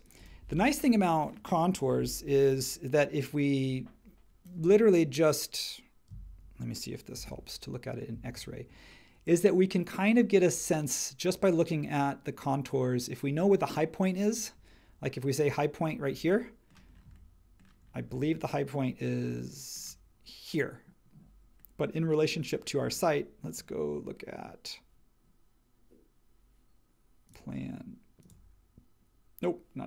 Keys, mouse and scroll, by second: 1.9 super+1, 7.1 shift+x.